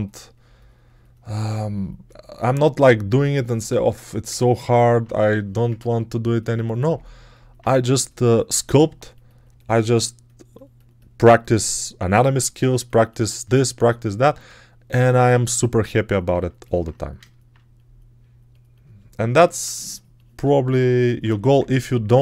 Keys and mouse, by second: 8.5 g, 21.1 1.